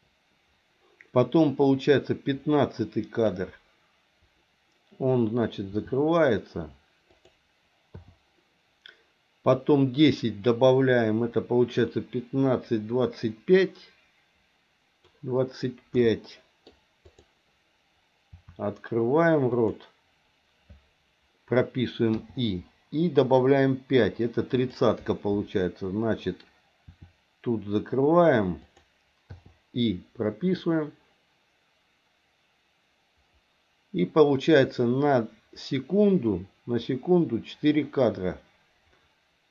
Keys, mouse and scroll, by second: 5.7 r, 7.9 i, 9.6-15.1 drag, 16.0 middle click, 17.1 click, 18.2 r, 22.2 i, 24.6 click, 26.8 r, 29.3 i, 30.5-39.5 drag.